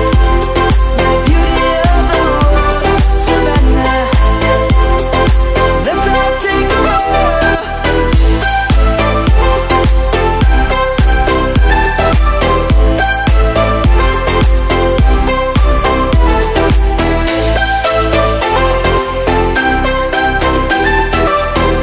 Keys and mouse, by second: 0.0 Tab, 0.5 right click, 1.0 click, 2.0 Tab, 3.5 click, 4.8 middle click, 5.2 middle click, 7.1 Tab, 8.2 click, 8.6 middle click, 9.5 click, 12.6 Tab, 13.4 click, 16.7 Tab, 17.1 click, 18.8 shift+click, 19.2 shift+click, 19.9 shift+Tab.